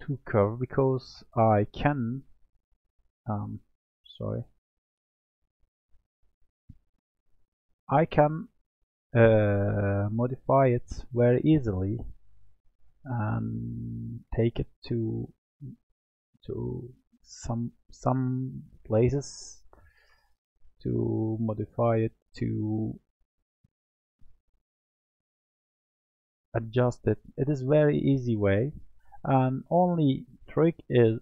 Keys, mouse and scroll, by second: 1.2 click, 4.4 click, 5.3 click, 6.7 Tab, 7.4-8.8 middle drag, 8.8 click, 13.6 click, 15.5 g, 19.7 click, 22.7 g, 25.0-27.3 middle drag, 27.3 ctrl+z, 27.7 ctrl+z, 28.1 ctrl+z, 28.9-30.9 middle drag, 30.9 click.